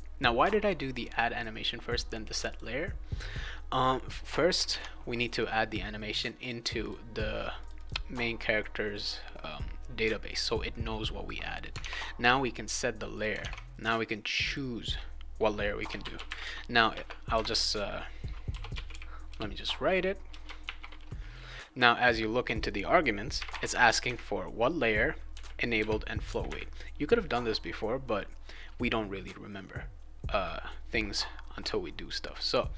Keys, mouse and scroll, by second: 2.4 click, 4.6 alt+Tab, 6.4 click, 6.8 click, 7.6 click, 7.7 click, 11.8 alt+Tab, 13.1 click, 13.4 alt+Tab, 14.4 click, 15.6-20.6 typing, 16.9 Return, 20.3 Return, 23.3 ,, 23.4 ,.